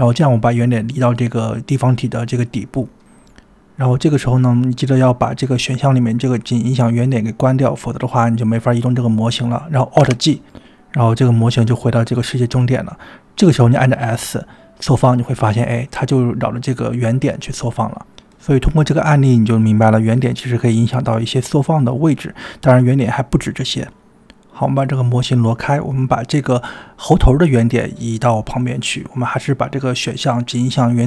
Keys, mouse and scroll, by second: 0.7 Tab, 1.2-1.6 scroll down 4, 2.4 Tab, 2.9-4.1 middle drag, 4.1 click, 4.5 g, 6.8-8.5 drag, 8.9 click, 10.1 alt+g, 10.9-11.6 middle drag, 11.7-12.6 middle drag, 13.2-14.0 middle drag, 14.7 s, 18.5 scroll up 2, 24.7 click, 24.7 scroll up 1, 25.2 g, 26.1 click, 26.9-28.0 middle drag, 30.3-31.0 drag.